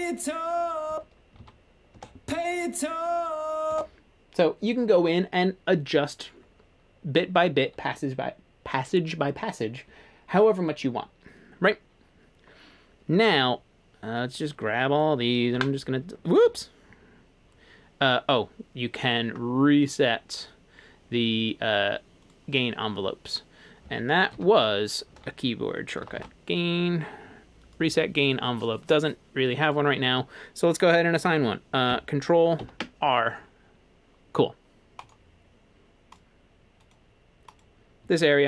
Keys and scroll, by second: 0.9 space, 1.4 super+z, 2.0 space, 15.5 Delete, 16.5 super+z, 24.3 super+k, 25.7-26.6 typing, 28.7 typing, 32.6 ctrl+r.